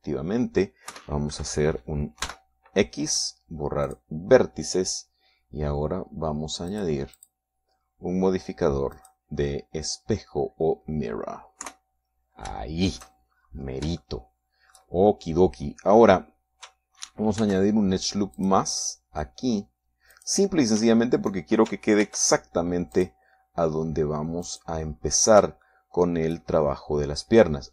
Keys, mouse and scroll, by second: 2.4 KP_1, 3.7 x, 5.4 click, 8.2 click, 8.6 click, 10.4 click, 11.8 scroll down 1, 13.1 KP_3, 14.0 shift+middle click, 14.8-15.4 shift+scroll up 1, 15.4 shift+middle click, 18.8 ctrl+r, 19.8 click, 21.6 click, 23.5 ctrl+r, 24.4 click, 25.9 click, 27.1 shift+middle click.